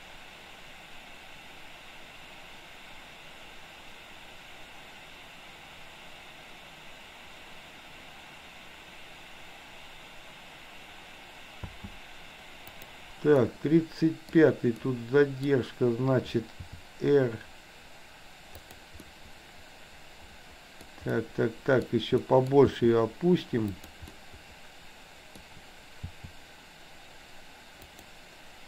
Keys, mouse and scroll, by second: 11.7 space, 12.8 click, 13.4-14.3 middle drag, 14.8-15.4 middle drag, 16.7 r, 19.0-20.9 middle drag, 21.2-21.9 middle drag, 22.2 middle click, 22.8 r, 24.0-25.5 middle drag, 26.2 r.